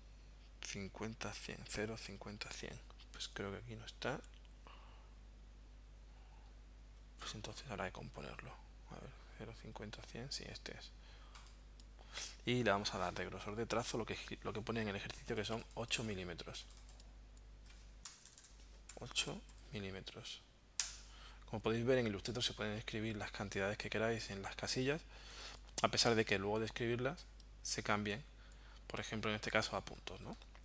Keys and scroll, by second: 18.1 BackSpace, 18.9 8, 19.3 m, 20.8 Return.